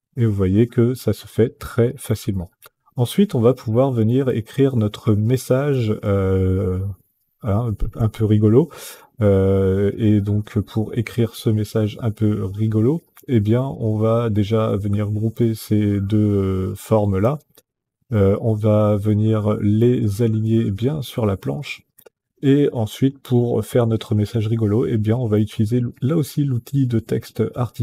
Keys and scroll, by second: 16.9 ctrl+g.